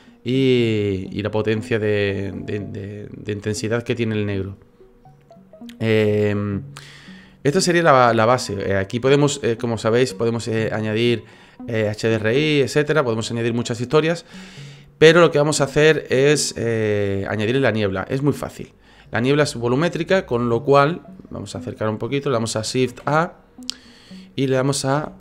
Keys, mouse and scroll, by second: 8.3 click, 18.6 click, 19.9 click, 20.3-20.7 scroll up 5, 20.7 scroll down 1, 20.8-21.4 scroll up 4, 21.5 middle click, 22.9 shift+a.